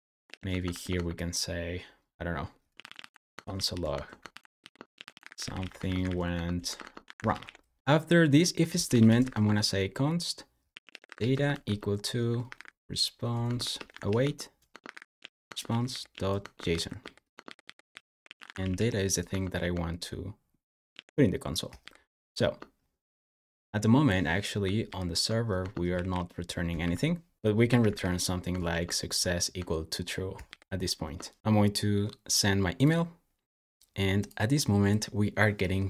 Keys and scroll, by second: 0.0-1.0 typing, 2.3-19.6 typing, 20.7 super+s, 21.6 super+j, 24.7 super+j, 25.5 Escape, 25.8-28.3 typing, 28.5 super+s, 30.3 super+j.